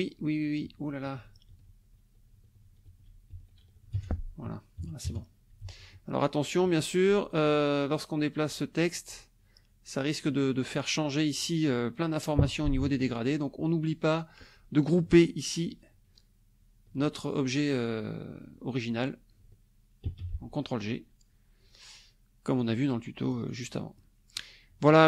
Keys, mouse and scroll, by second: 0.2 click, 1.5 ctrl+shift+z, 2.8 ctrl+shift+z, 3.9 ctrl+shift+F1, 4.0 ctrl+shift+click, 4.8 KP_Subtract, 5.0 KP_Add, 5.6 ctrl+s, 5.9 ctrl+click, 6.0 ctrl+middle click, 6.6 Escape, 7.4 click, 7.9 click, 8.5 click, 12.8 ctrl+z, 20.0 ctrl+g, 22.6 click, 24.0 click.